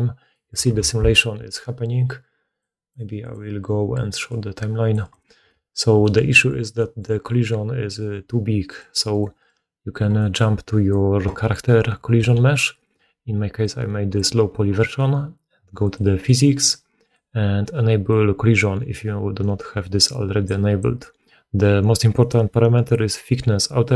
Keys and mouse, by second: 0.8 shift+space, 5.0-16.0 drag, 5.3-9.1 middle drag, 8.6 right click, 9.0 right click, 12.1 g, 16.0 middle click, 16.2 click, 16.4-18.0 middle drag, 18.0-23.9 drag.